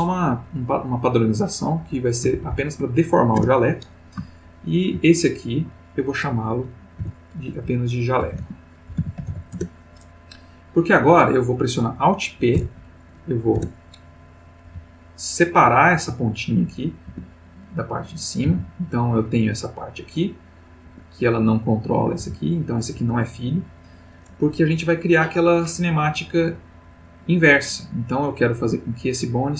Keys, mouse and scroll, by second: 1.8 Left, 2.4 shift+Right, 3.4 Return, 4.5 shift+middle click, 5.4 shift+click, 7.0 F2, 7.5-8.8 drag, 8.2-9.3 typing, 9.5 shift+Return, 12.5 alt+p, 13.6 Return, 14.6 g, 16.0 Escape, 17.6 Tab, 17.6 click, 18.5 r, 20.9 Escape, 21.4 click, 22.1 g, 22.9 Escape, 28.4 click.